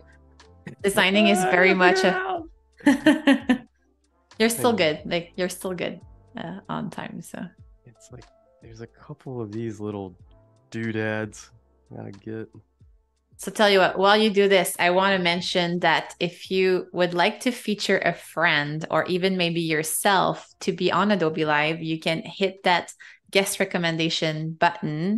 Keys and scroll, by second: 0.6 space, 4.4 alt+super+2, 9.8 z, 11.1 v, 15.5 super+z, 18.1 super+-, 18.8 space, 21.9 super+g, 23.0 super+-, 23.6 space.